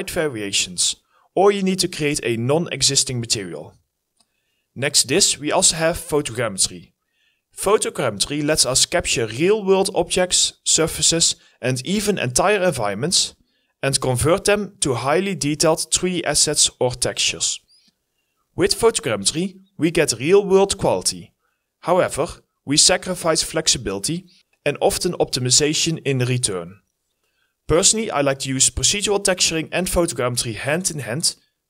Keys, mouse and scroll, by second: 4.2 alt+middle click, 5.3 alt+middle click, 9.4 alt+middle click, 10.0 alt+middle click, 11.1 scroll up 1, 11.4 scroll down 1, 11.8 alt+middle click, 12.3 alt+middle click, 13.9 alt+middle click, 15.3-15.9 scroll up 2, 15.5 alt+middle click.